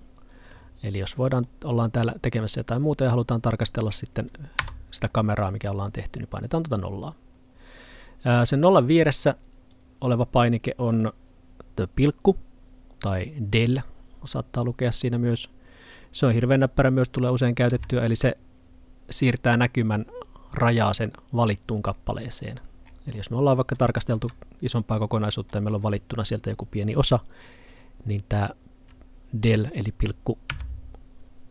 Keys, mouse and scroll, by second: 1.5 middle click, 8.3-9.8 scroll up 1, 9.8 click, 15.5-19.6 scroll up 1, 20.0 middle click, 21.9-23.8 scroll down 1, 23.8 middle click.